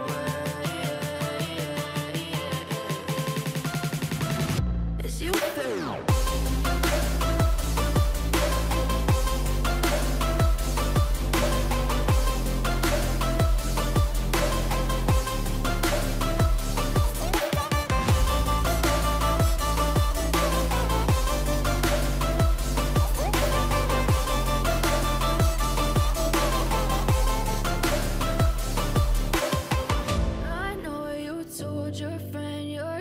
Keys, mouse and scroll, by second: 0.0-1.5 typing, 2.6-5.3 typing, 7.8 typing, 8.3 double click, 8.4 double click, 11.1 double click, 18.0 shift+click, 19.1 ctrl+g, 21.4 ctrl+a, 23.2 ctrl+d, 24.8-28.0 scroll down 42, 28.1-29.7 scroll up 21, 31.7-32.7 scroll up 17.